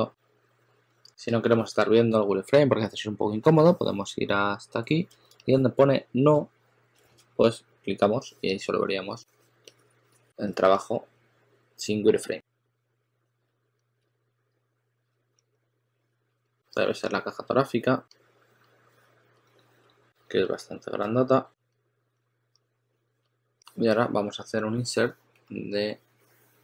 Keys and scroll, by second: 5.2 shift+super+a, 5.7 shift+super+a, 6.9 shift+super+x, 9.4 2, 10.5 2, 12.9 2, 13.3 2, 13.9 s, 15.3 s, 23.1 s.